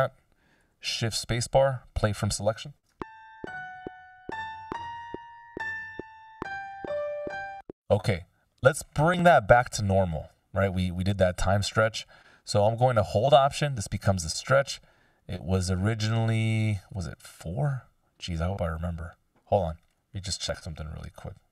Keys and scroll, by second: 0.8 c, 2.9 shift+space, 7.3 space, 7.7 t, 9.4 F16, 20.7 super+z.